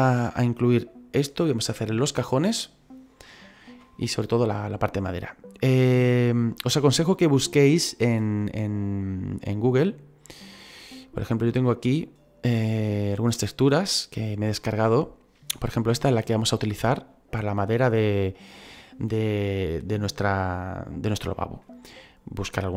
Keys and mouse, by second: 9.4 click, 11.6 click, 13.1 click, 15.0 click.